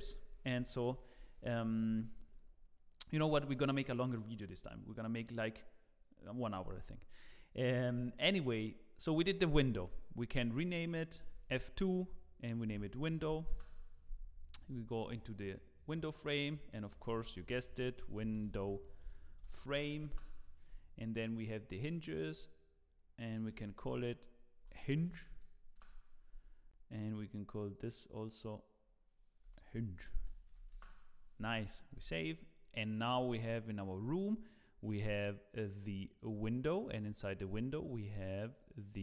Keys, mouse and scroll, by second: 0.7 shift+middle click, 1.5 scroll up 1, 1.7 shift+middle click, 10.4 click, 11.3 F2, 15.0 click, 16.7 click, 17.2 F2, 21.8 click, 23.5 F2, 23.5 click, 27.7 click, 29.4 F2, 29.4 click, 32.0 ctrl+s, 33.8 click, 36.2 click.